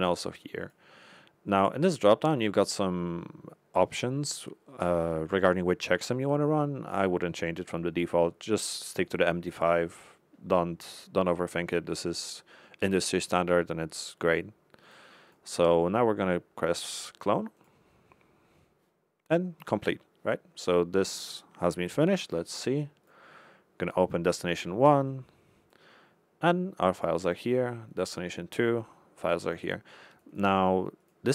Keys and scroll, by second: 14.8 Left, 17.5 Left, 22.1 Left.